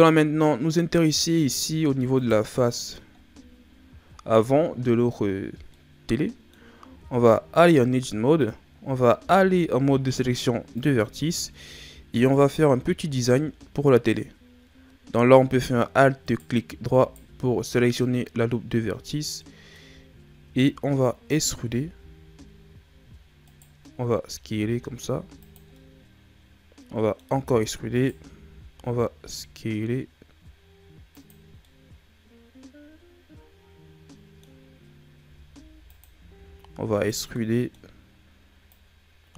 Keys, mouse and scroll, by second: 1.5 ctrl+scroll down 2, 2.1 right click, 2.6 middle click, 3.1 ctrl+scroll down 1, 3.6-5.7 scroll up 1, 5.7 middle click, 6.7 scroll up 1, 6.9 Tab, 9.2 ctrl+Tab, 12.3 alt+right click, 13.2-16.2 middle drag, 16.2 right click, 16.9 alt+right click, 17.7 alt+right click, 19.1 scroll down 1, 19.4 middle click, 20.1-21.5 shift+scroll up 1, 21.5 e, 24.2 s, 25.8-27.4 middle drag, 27.4 e, 28.3 s, 31.6 scroll up 1, 31.7-34.7 middle drag, 35.2 s, 36.4 e, 37.3-38.7 middle drag, 38.7 click.